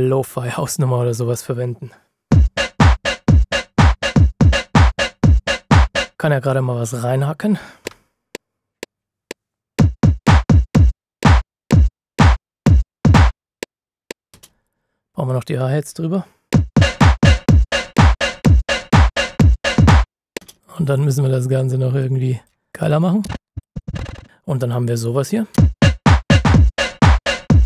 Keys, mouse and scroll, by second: 6.1 F9, 7.8 KP_Multiply, 7.8 typing, 10.1 typing, 14.3 space, 16.4-16.9 typing, 16.5 KP_Multiply, 20.3 KP_Multiply, 20.6 click, 22.7-24.0 typing, 22.8 click, 23.5 click, 24.2 ctrl+shift+scroll down 1, 25.5 typing.